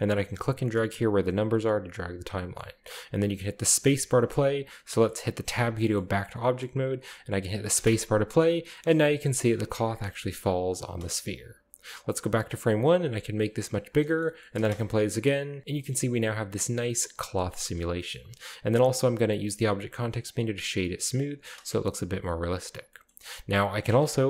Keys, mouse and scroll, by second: 0.2-1.8 drag, 2.3-3.0 middle drag, 3.5-4.5 scroll down 1, 4.6-5.7 scroll up 2, 5.5 Tab, 5.9-6.9 scroll down 2, 6.0-7.2 middle drag, 7.7 space, 8.7-9.5 scroll down 2, 8.8-9.8 shift+middle drag, 9.5-10.4 scroll up 2, 10.1 shift+middle drag, 10.4-10.9 shift+middle drag, 10.8-12.0 scroll up 1, 12.0 click, 12.9 s, 13.7 shift+click, 14.6 space, 15.6-16.2 shift+middle drag, 17.2 click, 18.1-18.8 middle drag, 19.3 w, 20.3 click, 21.4 space, 22.0-22.5 drag, 22.6-23.1 drag, 23.7 w.